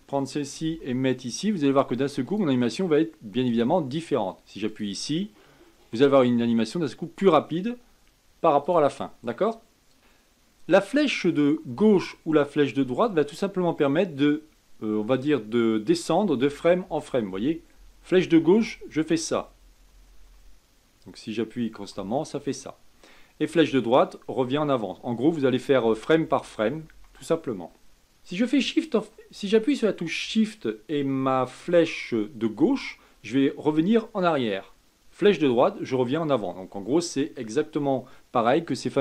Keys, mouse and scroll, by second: 0.6 g, 3.4-7.7 drag, 8.6-10.0 drag, 10.0 Right, 11.6 Left, 12.7 Right, 16.4 Left, 16.8 Left, 17.2 Left, 17.7 Left, 18.1 Left, 18.5 Left, 18.9 Left, 19.2 Left, 19.5 Left, 19.9 Left, 20.1 Left, 20.4-21.9 Left, 22.3-23.3 Right, 23.6-24.3 Right, 25.8 Left, 26.2 Left, 26.5 Left, 26.9 Left, 32.5 shift+Left, 35.2 shift+Right.